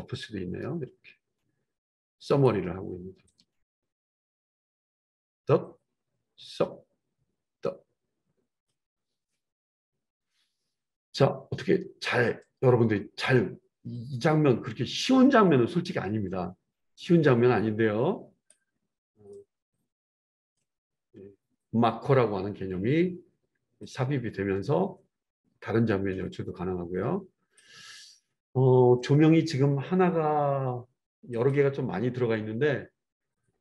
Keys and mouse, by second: 5.0-20.6 drag, 20.6-23.8 middle drag, 23.8-31.5 drag, 31.5-33.6 middle drag.